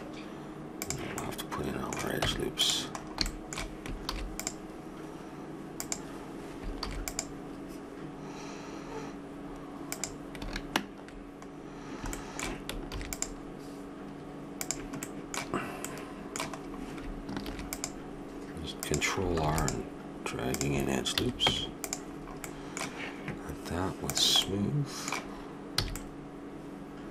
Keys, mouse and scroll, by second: 1.2 middle click, 2.2 Tab, 4.0 ctrl+r, 6.8 ctrl+r, 11.6-13.6 middle drag, 12.9 ctrl+r, 14.0-15.8 middle drag, 17.4 ctrl+r, 19.4 ctrl+r, 21.1 a, 21.4 Tab, 24.1-25.9 drag, 25.8 a.